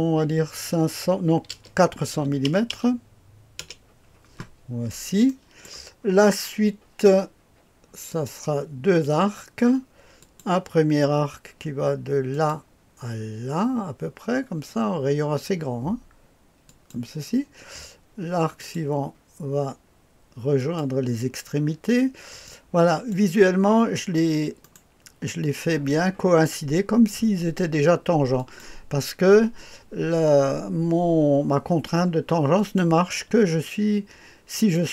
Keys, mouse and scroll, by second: 0.2 KP_5, 2.1 KP_4, 2.4 KP_0, 2.7 KP_0, 3.6 Return, 4.7-5.2 scroll down 1, 5.2 click, 8.1 click, 8.6 typing, 10.2 click, 12.3 click, 16.6 click, 18.5 click, 20.5 click, 22.4 click, 24.6 right click, 28.3 click, 32.5 click, 34.5 click.